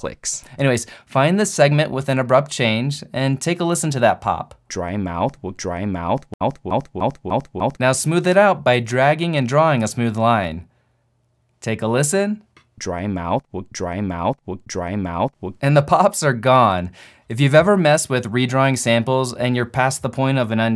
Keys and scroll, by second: 4.7 alt+/.